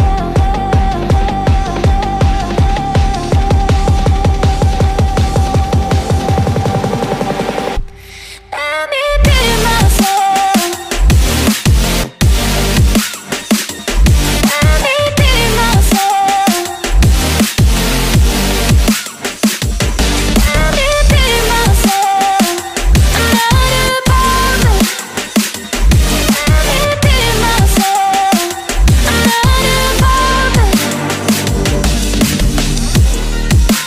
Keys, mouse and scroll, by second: 6.5 right click, 7.4 right click, 14.0 ctrl+click, 19.1 right click, 29.4 ctrl+click, 30.4 ctrl+click.